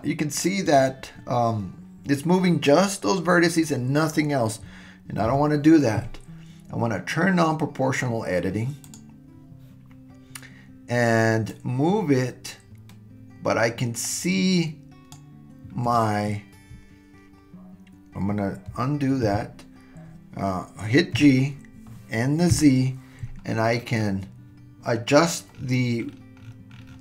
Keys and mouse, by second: 5.3 super+z, 8.8 click, 11.5-15.1 drag, 19.3 super+z, 21.2 g.